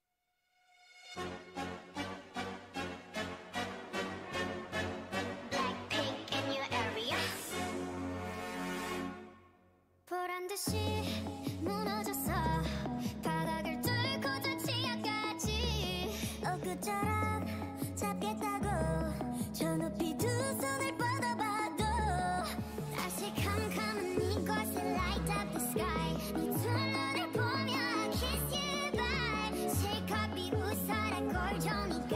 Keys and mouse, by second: 0.6 click, 1.0 a, 1.6-3.4 drag, 2.1 x, 3.3 a, 4.1 a, 4.3 Tab, 4.9 Tab, 5.7 a, 6.1 a, 6.4 ctrl+r, 6.9 g, 8.5 a, 8.7 a, 9.7 Tab, 10.6-11.9 drag, 10.8 Tab, 11.1 a, 11.9 Tab, 12.8-14.6 drag, 13.8 Tab, 14.0 a, 14.4 w, 15.9-19.4 drag, 17.6 Tab, 20.1 ctrl+j, 25.4 ctrl+Tab, 26.0 ctrl+Tab, 27.5 ctrl+Tab, 28.2 ctrl+Tab, 31.5 ctrl+Tab.